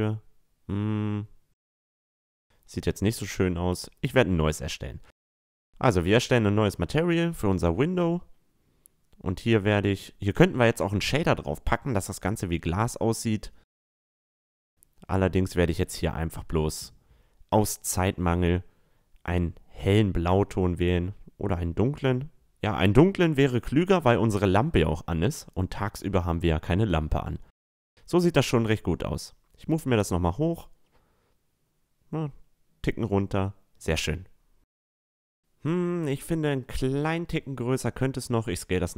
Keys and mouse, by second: 1.6-3.2 middle drag, 3.3-7.4 drag, 9.2 middle click, 9.5 Tab, 9.9-13.0 right drag, 10.7-13.0 drag, 11.4 Tab, 12.0 a, 13.0 middle click, 15.0-16.8 drag, 23.3-25.0 drag, 25.5-27.3 right drag, 26.8-30.0 drag, 31.4-33.0 drag, 32.2 a, 32.4-33.8 middle drag, 34.2 middle click, 34.4 middle click, 35.2-35.8 middle drag, 35.8-37.5 right drag, 36.1-37.5 middle drag, 36.9-38.5 drag, 37.6 s, 37.7 middle click, 37.7 right click, 38.5 a, 38.8-38.9 middle drag.